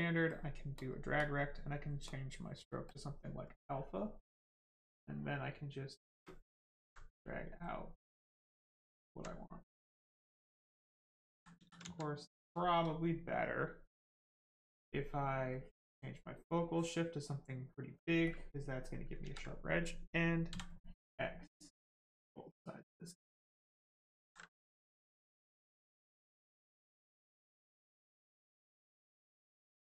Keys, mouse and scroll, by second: 0.7 click, 2.9 click, 5.5 space, 7.6 click, 9.1 alt+right click, 9.6 right click, 9.7 right click, 11.3 ctrl+z, 11.6 ctrl+z, 11.9 alt+right click, 12.3 right click, 12.4 right click, 12.5 shift+right click, 15.5 click, 18.3 click, 19.2 ctrl+z, 21.5 click, 24.2 ctrl+z, 24.8 click, 29.1 space, 29.3 right click.